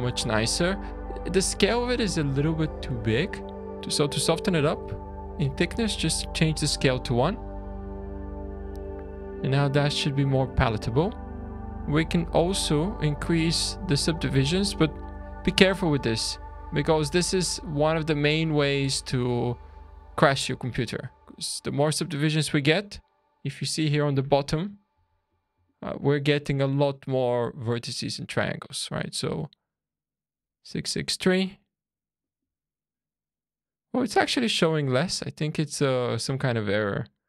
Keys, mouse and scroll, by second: 0.2 shift+middle click, 1.7-2.7 scroll up 4, 3.0 click, 3.5 scroll up 1, 4.0-5.7 scroll down 2, 5.7 click, 8.2-8.9 scroll down 4, 9.1 shift+middle click, 10.7 click, 12.3 click, 14.1 click, 15.1-15.5 scroll up 5, 17.6 click, 18.3-19.2 scroll down 4, 19.2 scroll up 2, 19.8-20.3 scroll down 4, 20.4 shift+middle click, 21.4 shift+scroll down 2, 27.9-29.0 scroll down 1, 29.0 click, 32.1 click, 36.8 click.